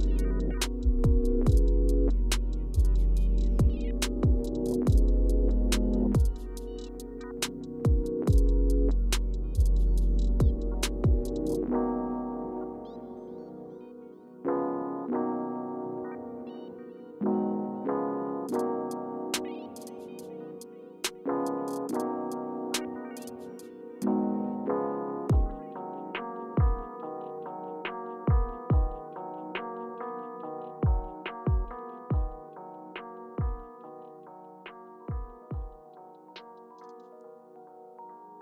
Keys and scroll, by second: 0.4 Return, 1.8 0, 2.0 Return, 4.1 super+z, 4.1 typing, 8.2 super+g, 9.9 super+z, 12.8 typing, 23.8 Return, 28.7 Left, 29.6 Return, 30.1 Return, 30.9 Return, 32.4 Up, 33.5 Return, 36.4 Left, 37.0 Right, 37.3 Right.